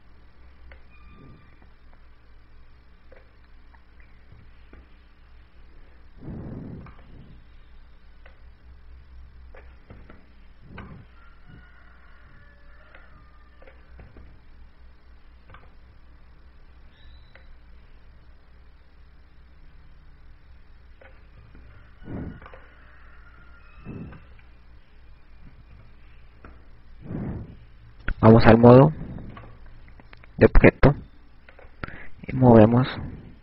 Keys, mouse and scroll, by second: 1.1 right click, 2.6 click, 6.5 i, 7.0 right click, 10.2 click, 11.6 i, 12.4 right click, 14.8 click, 15.6 i, 18.2 click, 23.1 i, 24.0 right click, 24.8 i, 25.7 right click, 27.2 i, 31.0 ctrl+Tab, 33.1 click.